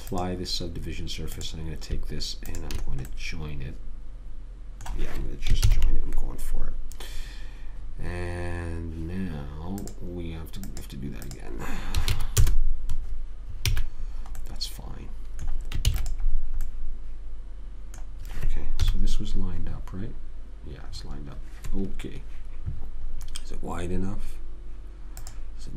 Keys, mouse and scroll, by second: 6.0 ctrl+j, 10.1-13.1 drag, 14.0 a, 16.2 ctrl+s, 17.0 middle click, 19.1 KP_1, 20.1 middle click, 21.2-22.3 middle drag, 23.5-25.5 middle drag, 25.5 click.